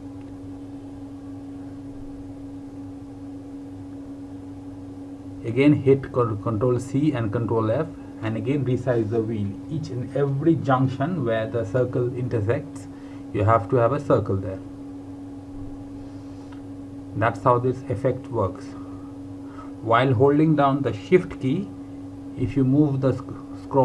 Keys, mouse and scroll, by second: 1.4-2.0 alt+scroll down 2, 3.1 space, 3.6 space, 9.1 click, 12.7 KP_3, 16.6-20.9 scroll down 1.